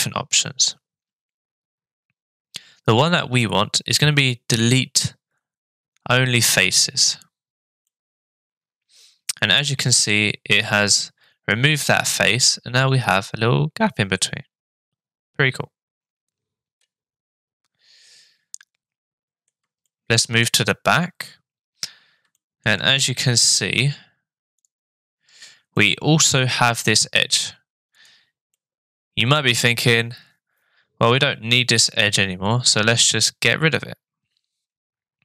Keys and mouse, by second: 7.8-10.1 middle drag, 11.7-19.5 middle drag, 19.8 shift+click, 22.4 shift+middle click, 24.6 click, 25.7-26.9 middle drag, 28.0 click, 28.5-35.2 middle drag.